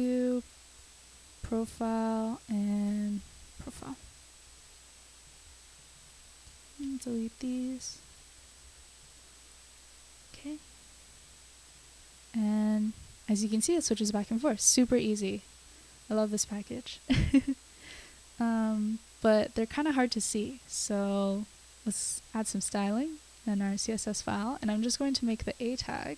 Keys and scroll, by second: 0.7-5.2 typing, 5.2 super+s, 7.5 BackSpace, 9.1 BackSpace, 9.3 super+s, 24.7 Return, 24.8 Return, 25.1 a, 25.2 space, 25.5 shift+[, 25.7 Return.